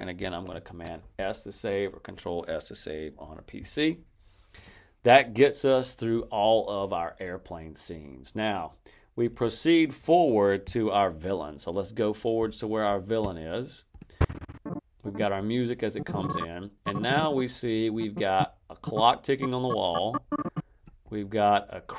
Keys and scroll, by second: 0.4 super+s.